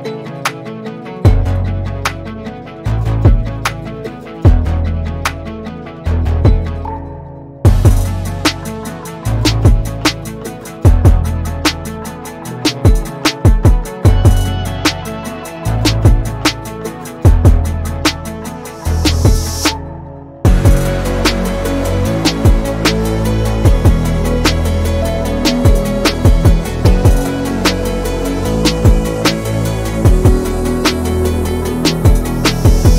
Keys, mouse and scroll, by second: 0.8 Tab, 1.2-3.3 middle drag, 3.3 KP_1, 4.7 Tab, 5.3-7.1 middle drag, 7.1 Tab, 8.3 ctrl+a, 9.3 Tab, 10.2 ctrl+b, 16.0 Tab, 16.4 click, 16.9-18.7 middle drag, 18.7 click, 19.4 /, 20.1 drag, 20.4-21.2 middle drag, 21.2-21.9 scroll up 3, 21.9 scroll up 2, 22.2 click, 22.9 Tab, 24.2-25.9 scroll down 5, 27.1 Tab, 27.4-28.0 scroll up 5, 28.3-29.0 middle drag, 29.0 s, 30.3 drag, 30.6-32.9 middle drag.